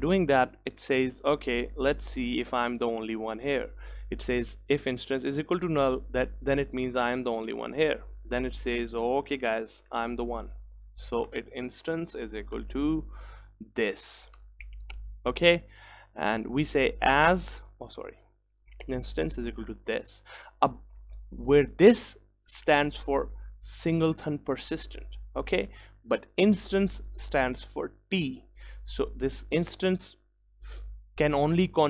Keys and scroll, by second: 14.4 Return.